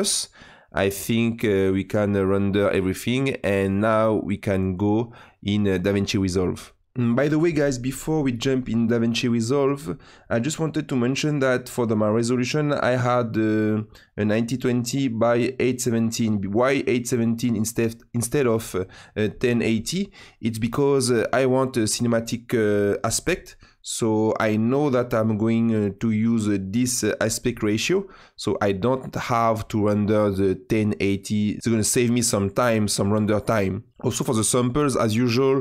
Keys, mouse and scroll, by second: 6.8 space, 30.6-33.9 drag.